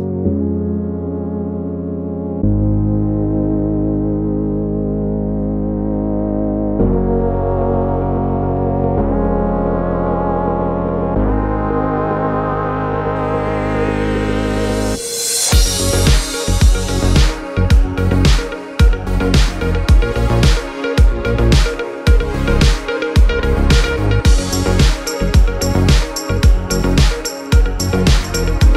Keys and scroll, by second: 13.7 0, 14.1 Return, 19.3 0, 19.6 Return.